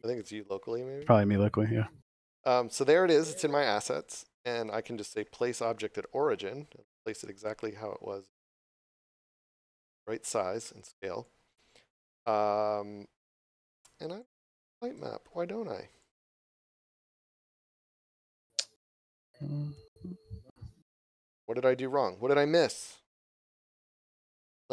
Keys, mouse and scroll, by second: 1.1 click, 4.0 right click, 8.6 click, 11.2 click, 12.5 scroll down 1, 14.2 click, 15.3 scroll up 1, 16.0 click, 17.9 click, 18.6 scroll up 1, 21.4 scroll down 1, 23.7 click.